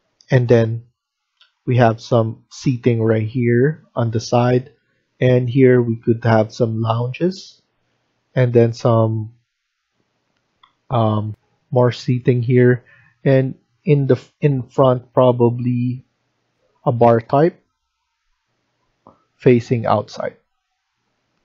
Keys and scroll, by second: 11.2 F1, 16.4 F1.